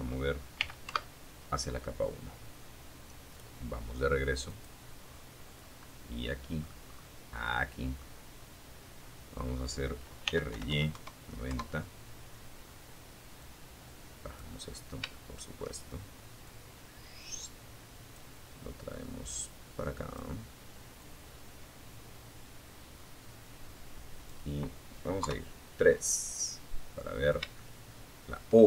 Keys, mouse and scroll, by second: 2.7 click, 3.2-4.0 scroll down 2, 4.0-5.0 middle drag, 5.1-5.4 scroll up 1, 6.1 scroll up 1, 6.2-7.7 middle drag, 8.4 r, 8.7 y, 8.9 KP_9, 9.1 KP_0, 9.6 KP_Enter, 11.6-12.8 drag, 12.8-13.2 scroll down 1, 13.3 shift+middle click, 14.6-16.5 drag, 17.4-18.5 drag, 19.2-22.6 drag, 23.4 KP_3, 25.0-25.6 scroll up 4, 25.8 shift+middle click, 27.3-28.6 middle drag.